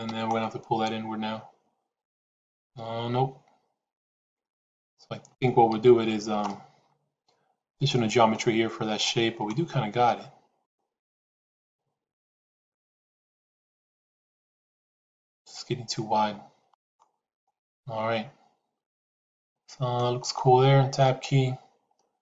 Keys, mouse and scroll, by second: 0.0 g, 5.8 ctrl+z, 9.2 g, 17.4-20.0 middle drag, 20.8 Tab.